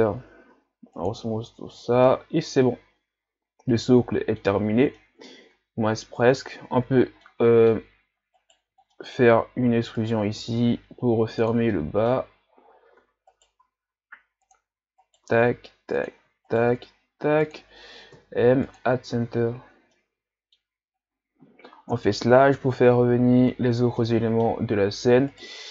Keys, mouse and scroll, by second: 0.1-0.5 scroll down 1, 0.5 w, 1.5 a, 1.7-2.1 scroll down 2, 2.1-5.5 middle drag, 5.5-6.3 scroll up 2, 6.3 Tab, 7.2-8.4 middle drag, 8.4 alt+right click, 9.0 middle click, 9.6 e, 11.8-13.0 middle drag, 13.0 e, 13.7 s, 18.1 m, 19.1 Tab, 19.7 scroll down 1, 19.9-21.0 middle drag, 21.0 scroll up 3, 21.9 KP_Divide, 22.9 scroll down 4, 23.7 scroll down 4, 24.0 middle click, 24.7-25.3 scroll up 1, 25.3 right click.